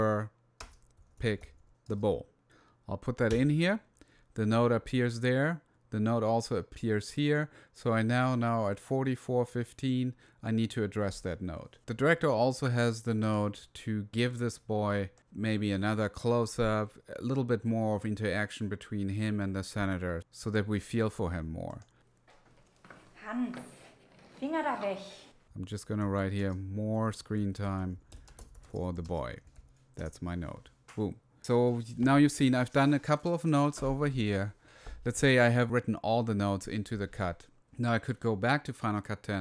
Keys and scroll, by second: 0.0-2.5 typing, 3.7 Return, 25.6-30.4 typing.